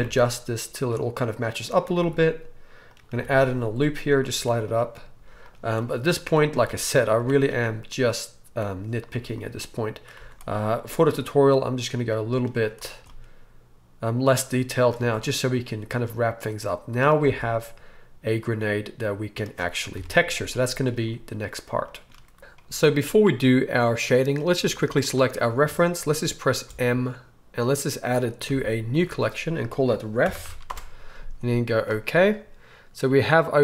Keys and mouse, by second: 0.8 click, 2.0 ctrl+r, 4.3 z, 5.2 z, 5.9-7.1 middle drag, 6.5 s, 7.1-9.7 drag, 7.2 z, 9.1 z, 9.7-12.0 middle drag, 10.1 z, 10.8 s, 12.0-16.1 drag, 12.5 z, 15.0 Tab, 15.9 right click, 16.1-18.2 right drag, 17.2 alt+a, 18.2-23.7 middle drag, 19.9 KP_1, 23.7-33.6 right drag, 26.6 m, 28.4 m.